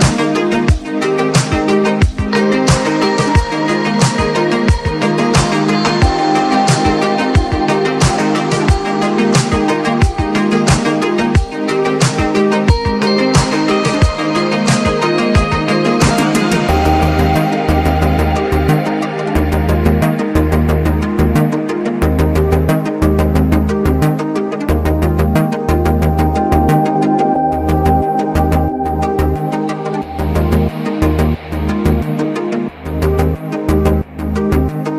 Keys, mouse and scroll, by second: 0.9-2.2 drag, 3.9-6.8 drag, 6.8-10.3 drag, 11.4 click, 12.3-12.7 typing, 15.0 click, 15.7 typing, 16.5 click, 18.5 click, 19.3-19.6 typing, 20.1 click, 20.8 Return, 21.9 ctrl+z, 23.1 click, 26.3-27.3 typing, 28.5 click, 30.6 click, 31.4-32.4 typing, 32.4-33.7 drag, 33.6-34.0 typing.